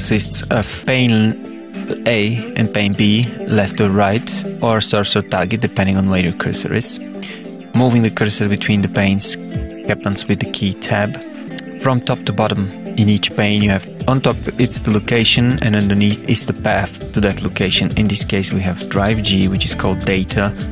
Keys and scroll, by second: 5.6 Tab, 11.3 Tab.